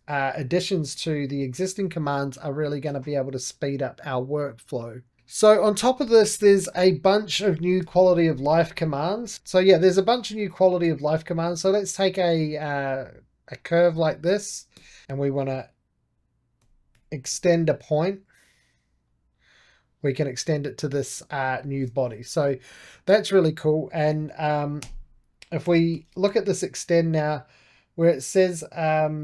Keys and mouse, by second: 0.0 middle click, 0.6-3.7 drag, 5.9 shift+middle click, 6.6-7.7 middle drag, 7.7 KP_1, 8.7 shift+middle click, 9.3 ctrl+click, 9.5 click, 10.1 shift+middle click, 10.9-13.5 drag, 13.5-14.6 right drag, 14.6 1, 15.0-16.5 drag, 16.2-17.7 typing, 17.8-21.6 drag, 21.6 ctrl+z, 22.2 2, 22.6 click, 23.0 right click, 23.3-24.7 drag, 24.7-26.6 typing, 26.8-29.2 drag.